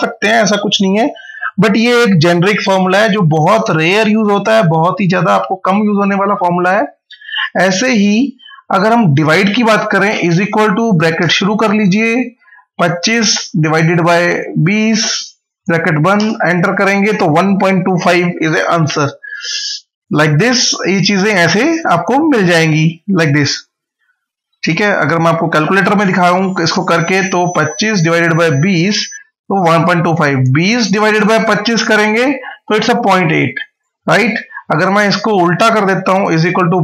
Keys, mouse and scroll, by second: 1.2 click, 7.0 click, 8.1 Delete, 8.9 click, 10.1 =, 11.0 shift+9, 12.2 Left, 13.4-15.3 typing, 16.0 Return, 19.8 click, 24.7 super+Num_Lock, 24.9 super+r, 26.0 Return, 32.4 scroll up 1, 33.6 click, 36.0 =, 36.4 Left.